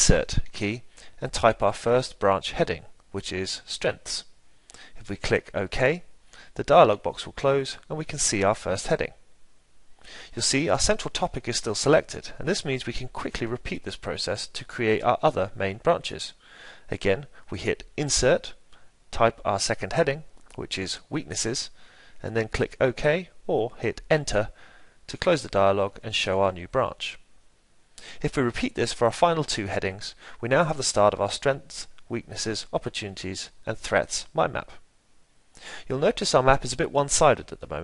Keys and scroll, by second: 13.6 Insert, 27.3 Insert, 32.4 Insert.